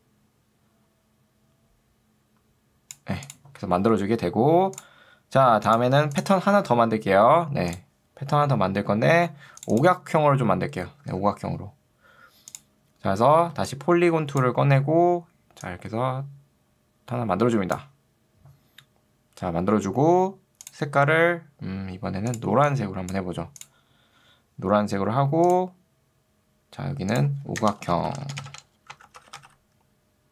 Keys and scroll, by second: 11.2 z, 13.4 ctrl+2, 14.8 Escape, 27.6 Return, 27.8 d, 28.4 BackSpace, 29.2 h.